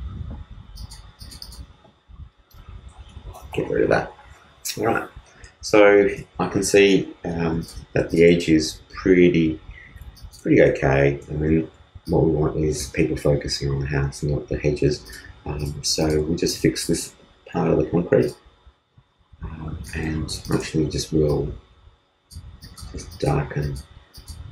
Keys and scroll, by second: 2.5 alt+BackSpace, 3.1 alt+super+BackSpace, 3.3 alt+super+d.